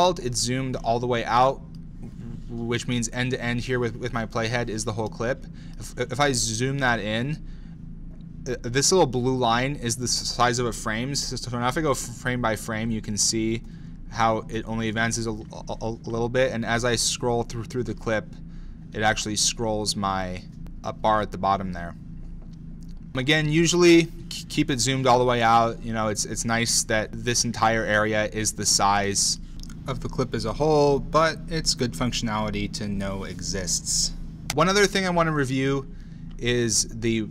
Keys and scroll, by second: 11.1 Right, 12.0 Right, 12.5 Right, 14.2 Right.